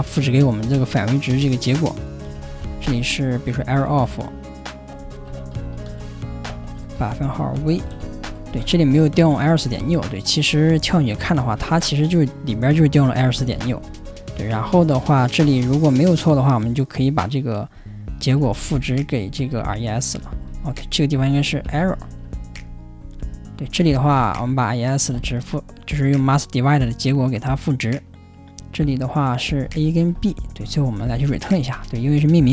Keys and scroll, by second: 7.8 ,, 8.5 ,, 13.5 ctrl+o, 29.6 ,.